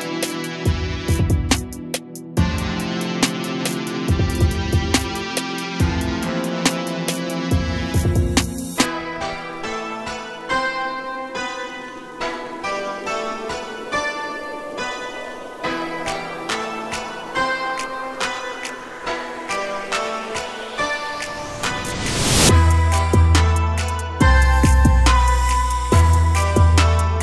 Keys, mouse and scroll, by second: 0.0 a, 0.2 a, 0.2-1.2 scroll down 3, 1.2-3.2 shift+middle drag, 3.2-3.6 scroll down 1, 3.6-4.5 scroll up 1, 4.5-5.7 shift+middle drag, 5.7 click, 7.3-9.5 drag, 11.2-12.0 scroll up 5, 12.0-12.6 shift+middle drag, 12.6 click, 13.7-14.0 scroll up 2, 14.6 click, 14.8 click, 15.2 click, 15.9 s, 17.7 g, 20.4 a, 20.6 Tab, 20.9 a, 21.0 a, 21.2-22.2 scroll down 2, 22.2-22.9 scroll down 1, 22.9-23.7 shift+middle drag, 23.7-24.9 scroll up 8, 24.9 click, 26.0 2, 26.1 click, 26.5 g.